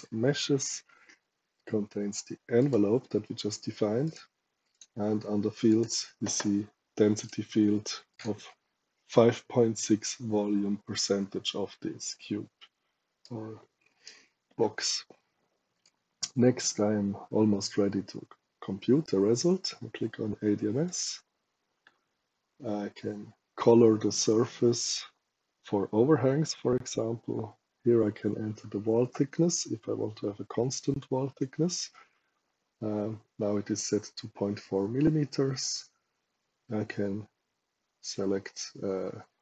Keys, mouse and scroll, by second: 2.5 click, 4.0 click, 4.6 click, 5.6 click, 7.1 click, 8.0 click, 13.1 right click, 15.6 click, 20.8 click.